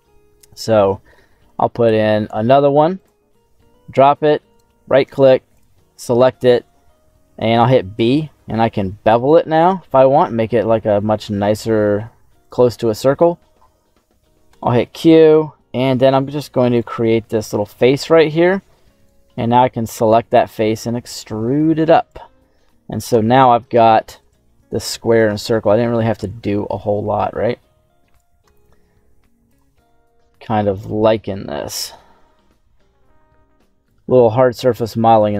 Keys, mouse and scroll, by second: 15.3-16.7 drag, 17.1 middle click, 18.9 right click, 19.9 e, 21.9 click, 22.3-22.8 scroll down 3, 23.4 shift+middle click, 24.3 shift+middle click, 24.7 scroll up 1, 26.1 i, 28.1 click, 28.4 e, 29.4 click, 29.8 s, 30.7 click, 31.6 click, 32.2 middle click, 33.0-33.7 scroll up 1, 33.7 right click, 34.7 alt+shift+right click, 35.1 right click.